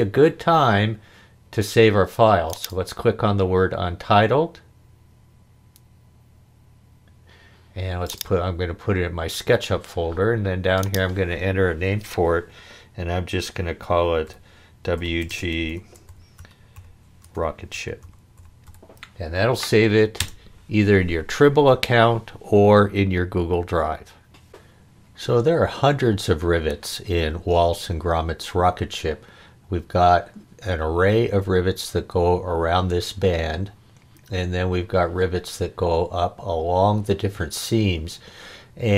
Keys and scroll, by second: 14.3-19.2 typing, 20.2 Return.